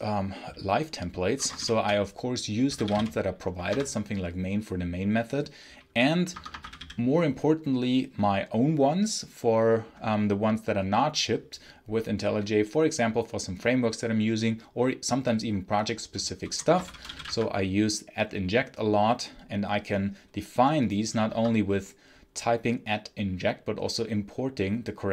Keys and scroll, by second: 1.3 Return, 2.3-3.3 typing, 3.6 Tab, 6.2 Escape, 6.5 k, 16.3 Return, 16.5-17.4 typing, 21.2 Escape.